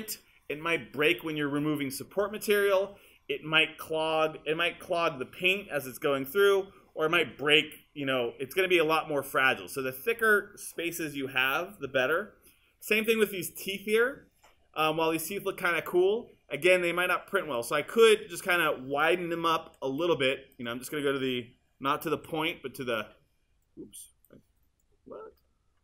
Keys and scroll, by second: 19.7 q, 22.2 r.